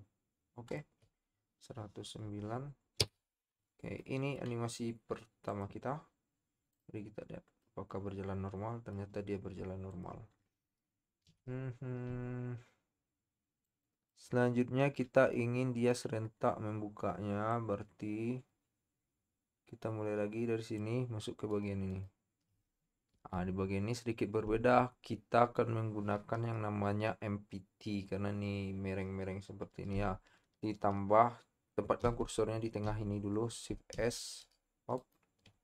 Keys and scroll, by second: 3.0 i, 11.5 z, 23.4 KP_7, 32.0 shift+s, 33.9 shift+s.